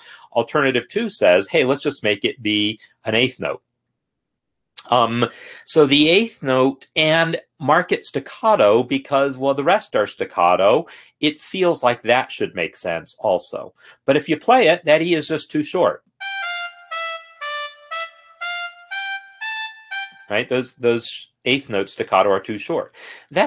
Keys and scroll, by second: 16.1 space, 20.3 space.